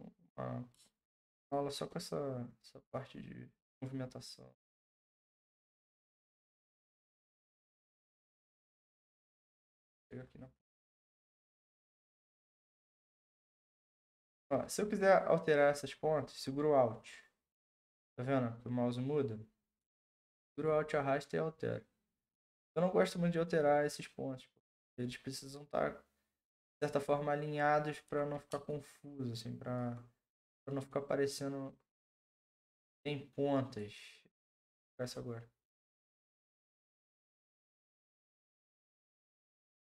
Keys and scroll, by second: 11.3 ctrl+z.